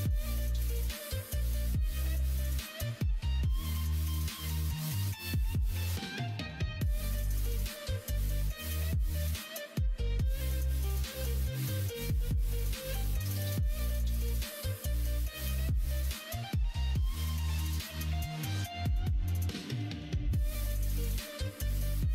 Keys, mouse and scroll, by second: 1.0 ctrl+click, 1.5 middle click, 2.1 g, 3.8 middle click, 4.0 r, 6.8 ctrl+z, 7.1 middle click, 7.9 r, 9.1 ctrl+z, 12.7 r, 14.6-16.7 middle drag, 17.2 middle click, 20.4 middle click.